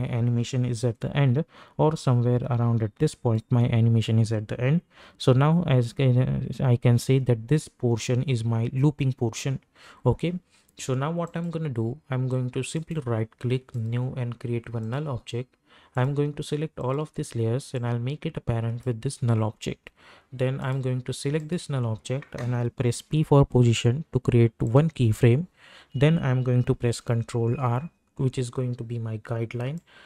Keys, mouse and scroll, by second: 0.8 u, 1.9-5.7 drag, 5.7 u, 11.2 click, 12.7 right click, 13.7 click, 16.8 shift+click, 17.7-20.6 drag, 23.0 p, 24.6 click, 26.9 ctrl+r, 29.7 click.